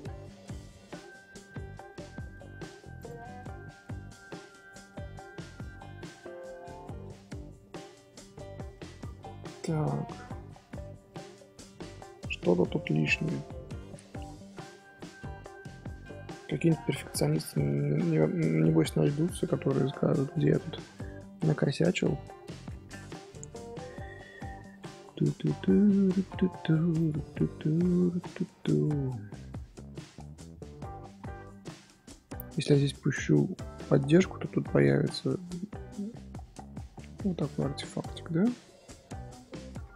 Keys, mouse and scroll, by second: 0.2 Tab, 0.5 Tab, 1.7 Tab, 3.0 click, 3.8 scroll up 1, 3.9 scroll down 1, 3.9-4.7 middle drag, 4.7 z, 5.0 scroll down 1, 5.2-5.7 middle drag, 5.7 Tab, 5.8 middle click, 6.6 Tab, 6.7 scroll up 2, 7.0 z, 7.6 scroll down 1, 7.6-8.1 scroll up 2, 7.7 Tab, 8.1-9.2 scroll down 2, 9.2-11.9 middle drag, 11.9-12.2 scroll up 2, 13.3 middle click, 13.9-14.2 scroll down 2, 14.2-17.2 middle drag, 18.0 scroll up 1, 18.6-21.8 shift+middle drag, 21.8-22.2 scroll up 3, 22.2 Tab, 22.5 Tab, 22.7 z, 26.9 click, 27.3 middle click, 27.6-28.0 scroll up 1, 28.0 shift+middle click, 28.2 scroll down 1, 28.3-28.8 scroll up 2, 28.8-32.1 middle drag, 32.1 scroll up 1, 35.5-35.8 middle drag, 35.8 Tab, 37.6 Tab, 38.2-39.9 shift+middle drag.